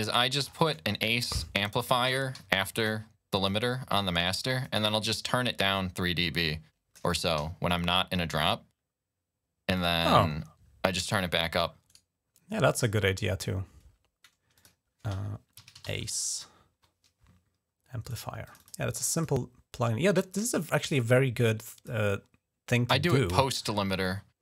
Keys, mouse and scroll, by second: 1.6 click, 2.1 click, 2.2 d, 2.6 click, 3.3-4.8 drag, 4.5 typing, 6.0 click, 7.1 g, 9.5 click, 11.7 right click, 12.0 right click, 14.3 click, 15.1-16.1 typing, 17.8 click, 18.2 click, 18.4 click, 18.9 click, 19.3 click, 20.7-21.7 drag, 22.9 click.